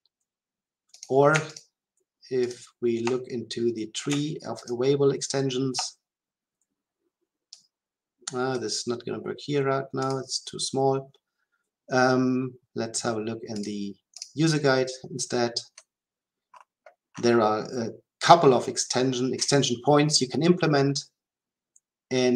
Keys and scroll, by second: 1.5 ctrl+b.